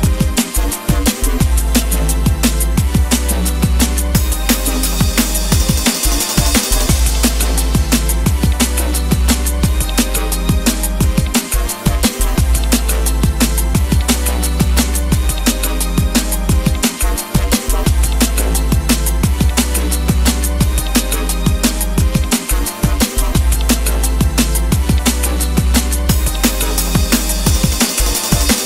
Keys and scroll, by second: 2.5 Escape, 4.3 Escape, 13.4 Escape, 21.0 Escape, 24.8 Escape.